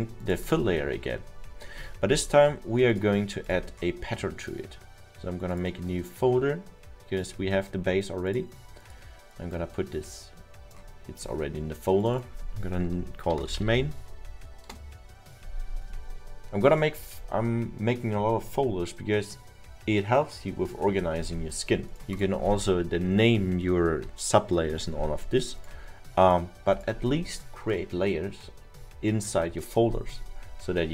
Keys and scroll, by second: 13.1-14.2 typing, 15.1 Return.